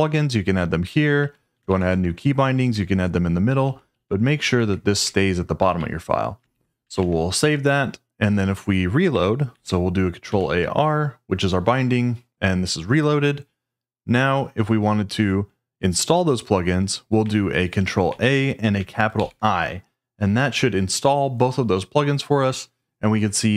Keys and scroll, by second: 0.8 Escape, 1.2 j, 1.7 shift+o, 1.9 shift+Return, 2.7 Escape, 3.4-7.3 typing, 5.0 Escape, 9.5 ctrl+a, 10.3 r, 18.1 ctrl+a, 19.1 shift+i.